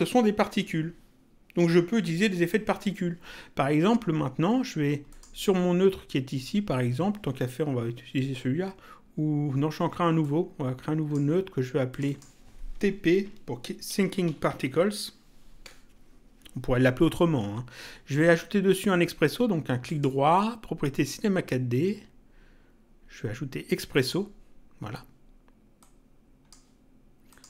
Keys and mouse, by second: 5.1 click, 10.2 click, 11.8 click, 14.2 shift+p, 15.6 Return, 19.9 right click, 23.9 click, 25.7 click, 27.3 click.